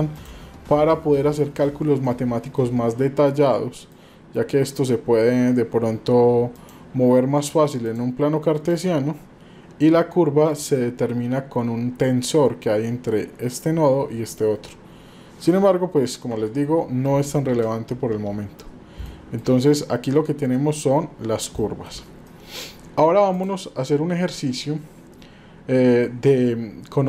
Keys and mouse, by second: 2.1 middle click, 3.4 middle click, 6.5 click, 7.8 click, 8.7 click, 16.3 Tab, 17.5 Delete, 19.1 shift+middle click, 19.8-20.6 middle drag, 21.7 shift+middle click, 22.3 middle click.